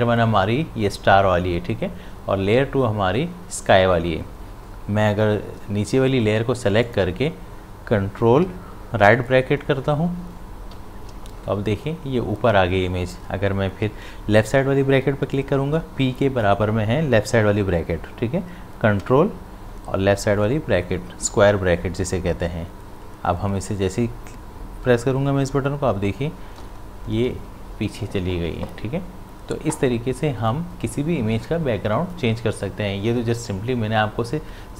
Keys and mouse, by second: 6.8 click, 10.7 ctrl+], 19.0 ctrl+], 26.6 ctrl+[.